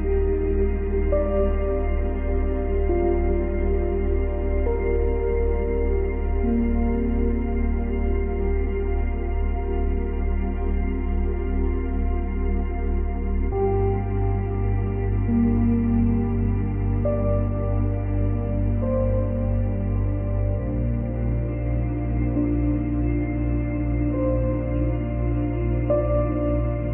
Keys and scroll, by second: 1.2 F9.